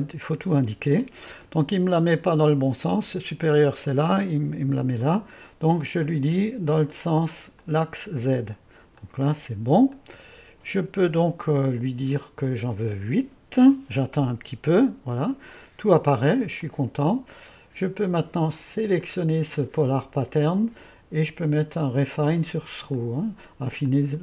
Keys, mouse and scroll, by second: 1.4-3.0 drag, 3.9 click, 4.4 click, 5.1 click, 6.2-7.5 drag, 7.8-8.9 drag, 9.7 click, 13.4-14.2 typing, 13.7 click, 19.0-21.1 drag, 21.4-23.7 drag, 23.9-24.2 drag.